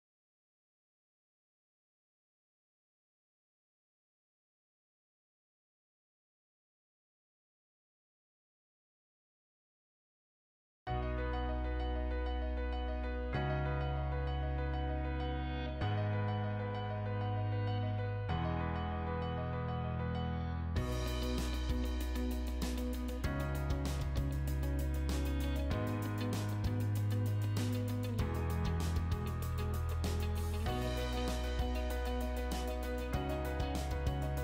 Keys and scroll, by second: 3.8 Delete, 11.9 Delete, 20.5 Escape, 28.8 Delete.